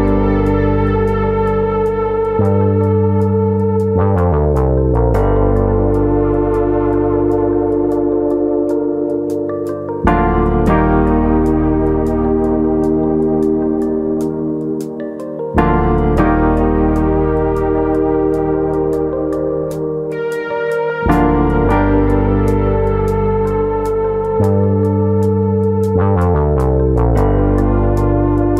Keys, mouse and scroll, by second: 1.2 alt+click, 3.1 right click, 4.6 middle click, 5.5 click, 6.5 click, 10.6 middle click, 11.6 alt+click, 12.3 alt+click, 13.2 right click, 15.2 click, 22.9 shift+middle click, 23.3 middle click, 25.1 click, 26.3 click.